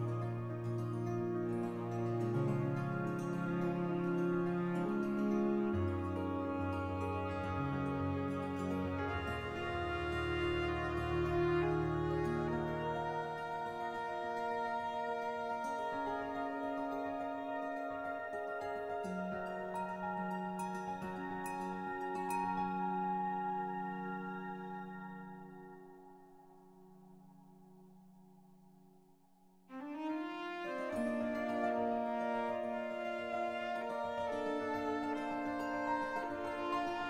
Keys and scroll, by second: 1.5-2.5 typing, 5.3 s, 9.8 s, 15.0 s, 18.4 2, 26.5 s, 27.6 s, 28.4 s, 31.9 x, 36.4 s.